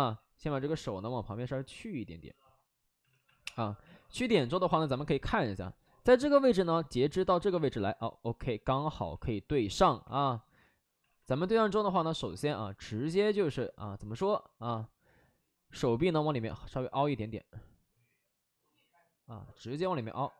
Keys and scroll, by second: 3.0 alt+s, 3.5 2, 4.5 alt+s, 7.4 alt+s, 8.9 alt+s, 9.9 2, 10.6 alt+s, 11.0 alt+s, 12.1 w.